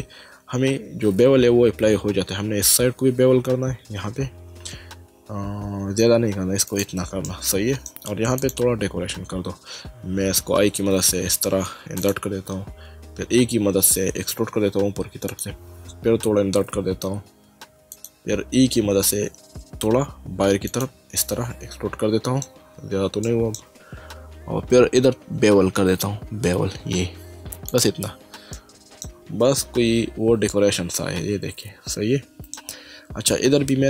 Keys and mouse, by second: 3.5 ctrl+b, 6.7 click, 7.2 middle click, 8.4 click, 12.0 click, 13.1 e, 15.3 click, 17.9 click, 18.7 e, 20.7 click, 21.2 middle click, 23.3 middle click, 26.0 ctrl+b, 27.7 click, 29.6 Tab, 30.5 middle click.